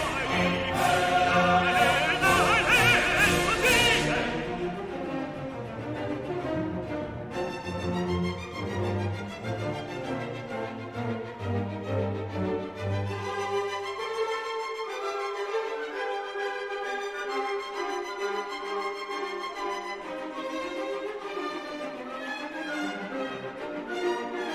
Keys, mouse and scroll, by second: 0.2 click, 1.1 click, 2.1 1, 2.6 5, 3.3-4.6 drag, 5.1 click, 6.4 click, 7.4 2, 7.8 0, 9.5-12.3 drag, 13.8 click, 14.8 3, 15.3 5, 16.4-17.7 drag, 18.2 click, 18.8 click.